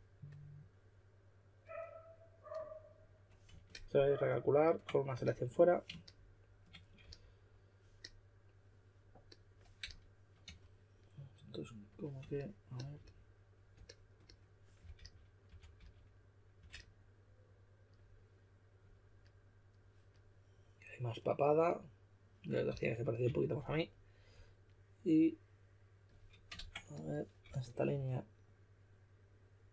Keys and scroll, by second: 7.0 s, 9.8-10.4 typing, 14.5-16.5 typing, 22.6-23.7 typing, 26.5 super+z, 27.4 s.